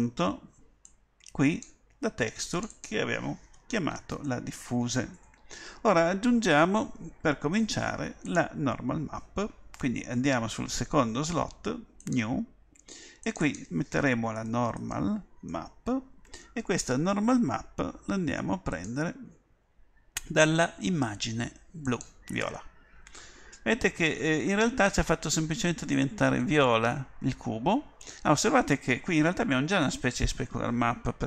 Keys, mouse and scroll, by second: 4.4 f.